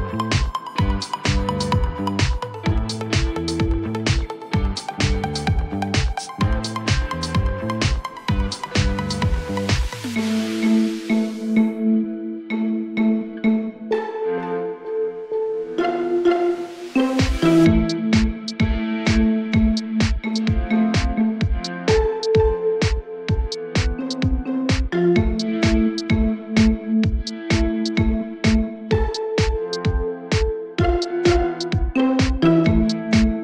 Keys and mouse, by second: 0.5-1.7 drag, 2.7-3.8 drag, 6.1-7.2 drag, 12.3 alt+click, 13.7 alt+middle click, 14.9 alt+click, 20.3-21.2 drag, 23.7 alt+click, 25.1 click, 26.1 click, 26.8 click, 28.1 alt+middle drag, 28.6 alt+click, 30.7 click, 32.4 click, 33.3 click.